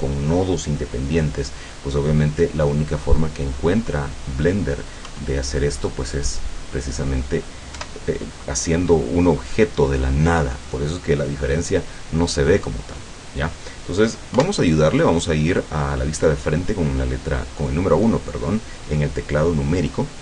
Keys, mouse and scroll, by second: 5.1 KP_1, 7.8 KP_7, 14.4 KP_1.